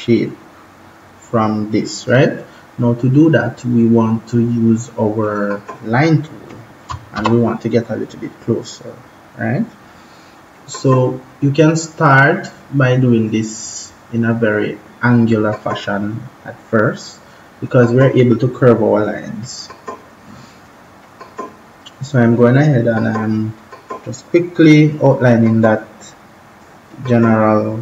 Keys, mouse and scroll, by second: 5.1 click, 7.0 ctrl+=, 10.4 click.